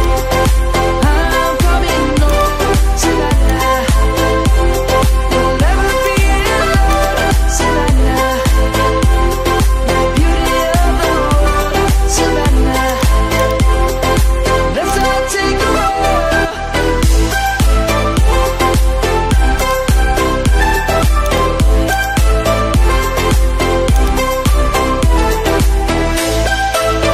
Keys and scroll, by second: 10.2 ctrl+t.